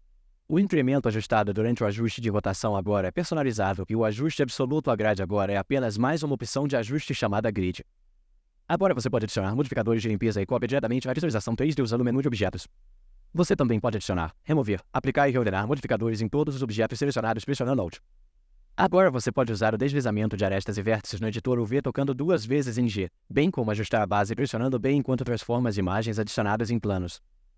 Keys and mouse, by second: 1.4 click, 3.7-5.5 drag, 8.9-14.7 drag, 15.4-16.1 alt+drag, 17.8 alt+click.